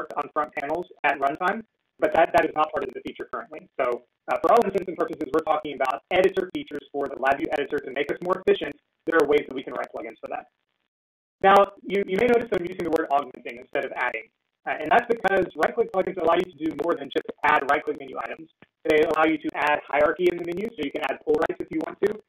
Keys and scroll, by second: 0.7 ctrl+a, 2.0 ctrl+z, 9.4 ctrl+z.